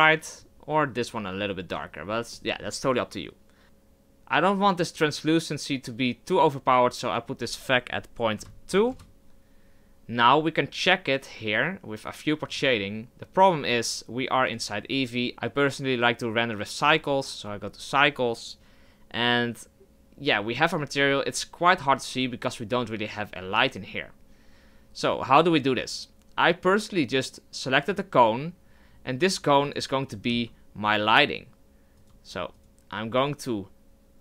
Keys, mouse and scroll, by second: 8.9 click, 12.5-13.8 drag, 16.9 click, 27.9 click, 29.6 click, 30.3 z, 32.0 right click, 32.6 right click.